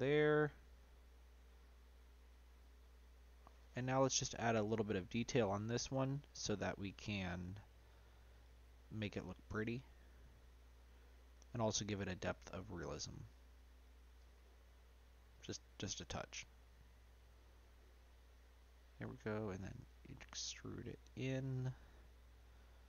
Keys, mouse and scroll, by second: 0.8 s, 2.8-4.0 middle drag, 4.0 Tab, 4.6-5.1 scroll up 2, 5.1-6.2 middle drag, 14.6-17.9 middle drag, 17.9-19.3 scroll up 1, 19.3 e.